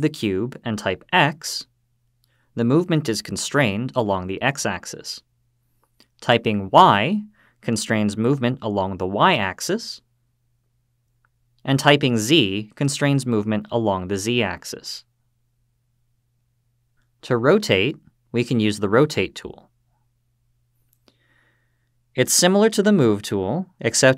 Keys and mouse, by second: 0.9 x, 6.7 y, 12.5 z, 20.9 click.